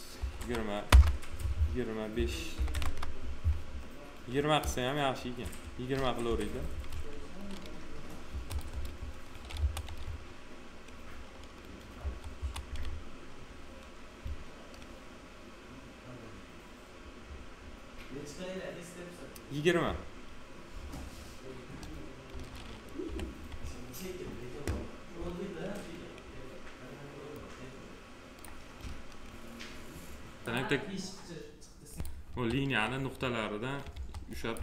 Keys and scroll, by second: 0.1 2, 0.8 Return, 2.5 2, 2.7 Return, 5.3 F4, 8.2 F4, 9.5 F4, 11.9 F4, 23.0 7, 32.2 1.